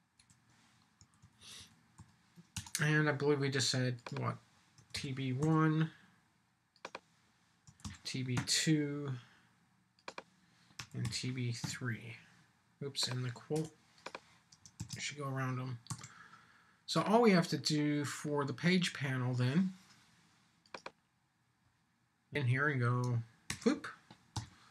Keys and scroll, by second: 1.0 Right, 2.5 Return, 14.8 shift+', 15.9 super+s, 23.5 super+v.